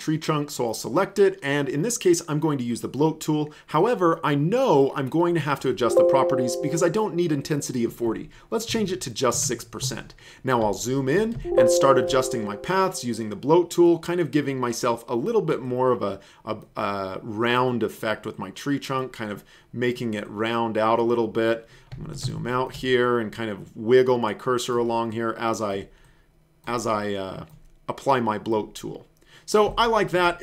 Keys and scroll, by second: 8.7 KP_6, 9.4 Return, 11.4 alt+space, 22.2 alt+space, 29.8 space.